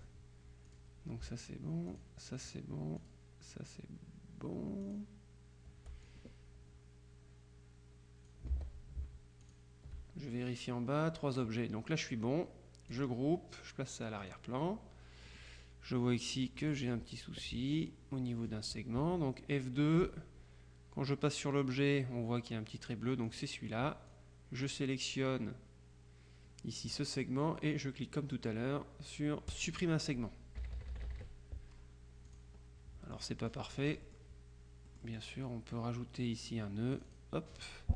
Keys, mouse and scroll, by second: 0.0 click, 0.8 click, 2.0 shift+click, 3.1 click, 4.9 click, 6.1-8.9 drag, 8.6 ctrl+z, 9.5 shift+click, 13.0 click, 14.3 click, 15.4 click, 16.3-17.5 drag, 17.5-18.4 scroll up 1, 20.0 click, 23.4 click, 24.2-25.3 drag, 29.6 click, 30.7 KP_Subtract, 32.3 click, 33.1-34.7 drag, 34.7-35.7 middle drag, 37.0 click.